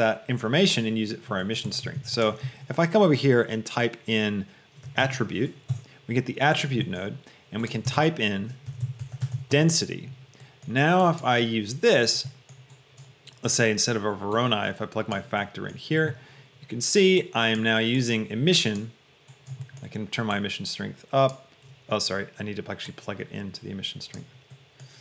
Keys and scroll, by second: 5.2 t, 5.8 Return, 8.8 e, 9.2 i, 9.5 y, 10.0 Return.